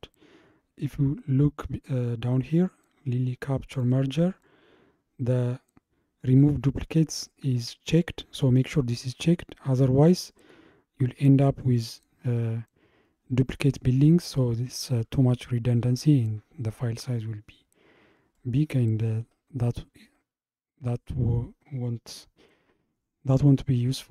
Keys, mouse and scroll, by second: 3.8-6.8 drag, 10.4 scroll up 2, 18.4-19.5 middle drag, 19.5-22.5 scroll up 2.